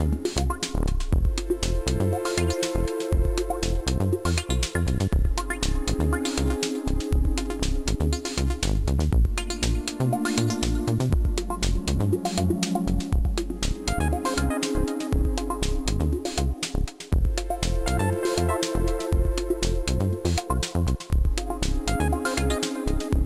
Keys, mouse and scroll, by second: 3.3 middle click, 6.3 click, 9.6 middle click, 10.6 middle click, 11.5 middle click, 12.4 click, 13.5 middle click, 14.9 click, 20.7 click.